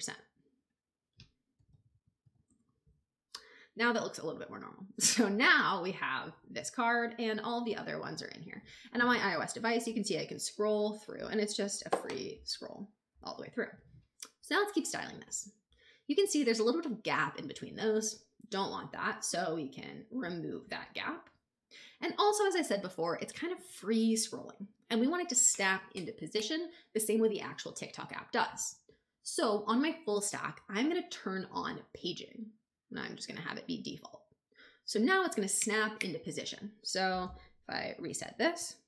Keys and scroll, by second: 1.2-2.1 typing, 2.3 shift+Return, 3.2 Return.